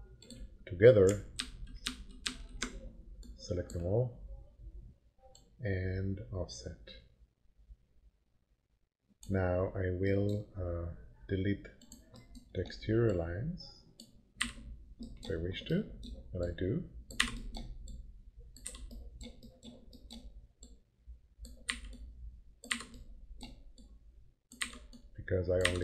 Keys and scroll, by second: 1.4 ctrl+z, 14.4 Delete, 17.2 Delete, 18.6 Delete, 21.7 Delete, 24.6 Delete.